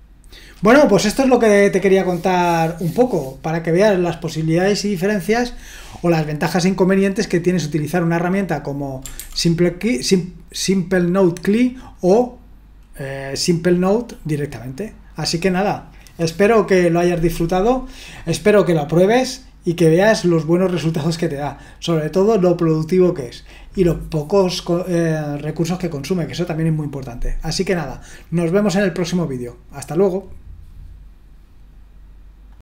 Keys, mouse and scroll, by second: 9.2 ctrl+c, 32.5 click.